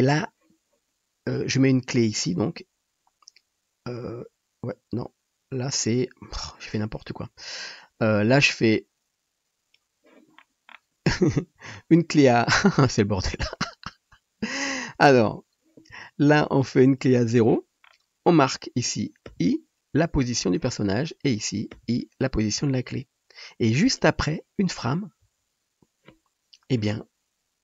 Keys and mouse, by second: 7.6-8.8 middle drag, 8.8-27.6 drag, 19.3 i, 21.8 i, 25.3 Right.